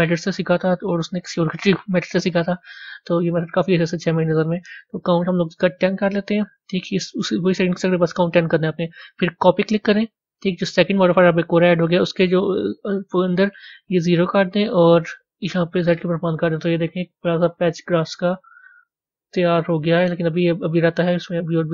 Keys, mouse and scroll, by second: 4.7-7.7 drag, 9.3 click, 10.1 scroll down 1, 12.1-14.3 drag, 14.6-16.5 drag, 16.5 middle click, 17.3 scroll down 2, 18.6-20.8 middle drag, 20.8-21.2 scroll up 4.